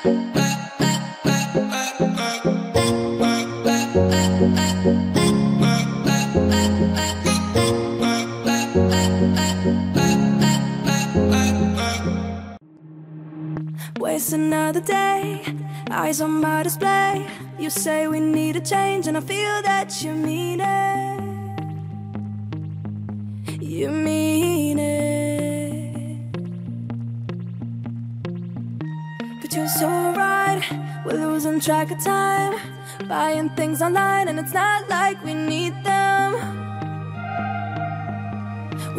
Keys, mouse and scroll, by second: 2.6-3.2 alt+scroll up 1, 4.3 scroll up 1, 6.3 click, 13.7 click, 16.2 click, 17.2 click, 20.8-23.0 alt+shift+drag, 23.3 scroll down 1, 24.9-25.6 alt+scroll up 1, 27.3 scroll up 1, 27.8 click, 28.5-29.0 scroll up 1, 29.0 alt+scroll down 1, 30.1-31.1 alt+scroll up 1, 31.3-33.9 drag, 35.9 right click, 38.2 click.